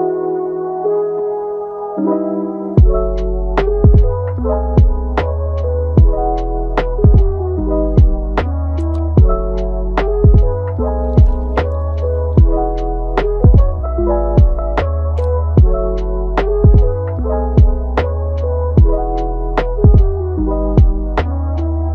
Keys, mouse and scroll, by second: 0.3 shift+d, 1.0 g, 2.1 g, 5.9-8.3 drag, 9.7 scroll down 2, 9.9-10.7 middle drag, 10.7 scroll up 2, 11.0-13.1 middle drag, 13.1 r, 14.4-15.0 middle drag, 15.0 r, 16.0-17.7 middle drag, 17.7 scroll up 1, 17.8-18.3 middle drag, 18.3 g, 19.6-20.6 middle drag, 20.6 click, 21.0 click, 21.4 middle click, 21.8 Tab.